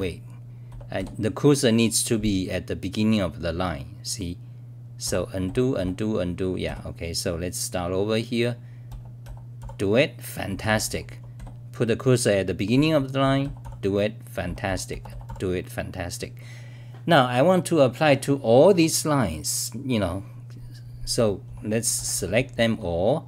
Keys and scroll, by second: 0.0-0.9 typing, 5.1 f, 5.4 f, 5.8 f, 6.6 d, 9.3-11.4 typing, 13.4-15.7 typing, 19.1-19.9 scroll down 4, 19.9 scroll down 3, 20.9-23.2 typing, 22.5 scroll down 1.